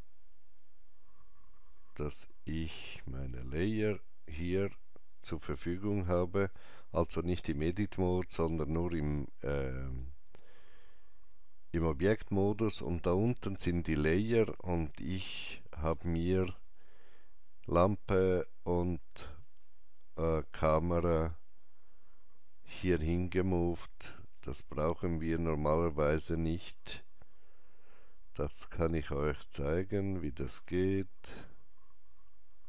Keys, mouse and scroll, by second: 2.7 Tab, 2.7 scroll down 1, 9.9 Tab, 9.9 click, 9.9-10.3 scroll down 1, 11.7 click, 16.7 click, 19.4 scroll down 1, 20.7 middle click, 24.3 click, 24.3 middle click, 24.3-25.4 scroll down 1, 25.4 click, 28.3 click, 28.3 middle click, 31.2 m.